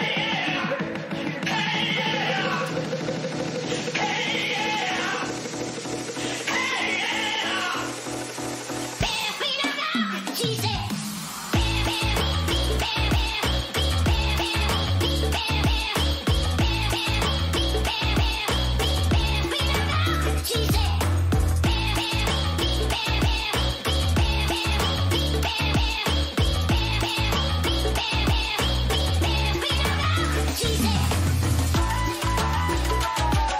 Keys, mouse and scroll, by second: 0.1-2.7 right drag, 1.0-3.1 drag, 10.0 a, 11.0 middle click, 12.1-21.3 right drag, 18.8-21.3 middle drag, 26.9-28.8 drag, 30.2-31.9 middle drag, 33.3 a.